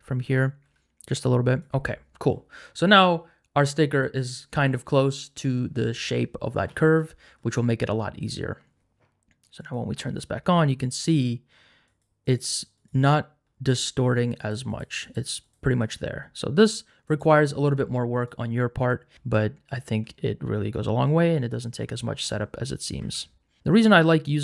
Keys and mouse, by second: 0.3 right click, 0.6 g, 1.7 Tab, 1.8 middle click, 5.2 click, 10.0 click, 11.8 click, 12.2 click, 12.7 click, 14.4 click, 15.0 click, 15.4 click, 17.1 click, 18.2 right click, 20.2 middle click, 23.0 Tab, 23.6-24.4 shift+drag.